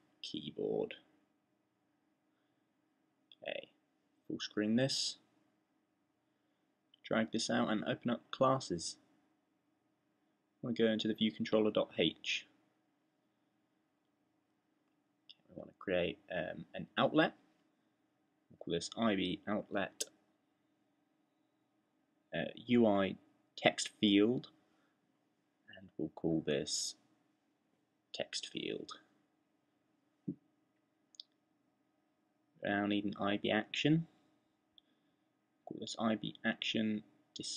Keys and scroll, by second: 0.0-0.3 typing, 2.5-3.9 typing, 17.6-19.1 typing, 21.4-29.2 typing, 31.8-32.8 typing, 33.9-37.5 typing.